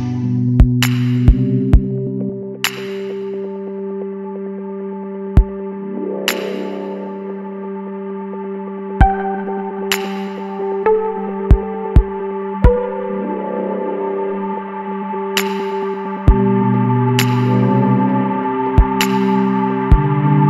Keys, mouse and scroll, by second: 0.4 scroll down 1, 1.8 Tab, 2.3 a, 3.2-4.6 drag, 6.6 click, 7.9-8.7 middle drag, 8.7 click, 14.0 Tab, 14.2 scroll down 2, 14.3-14.8 middle drag, 14.8 alt+a, 15.1-16.1 middle drag, 16.1 click, 19.8-20.4 drag.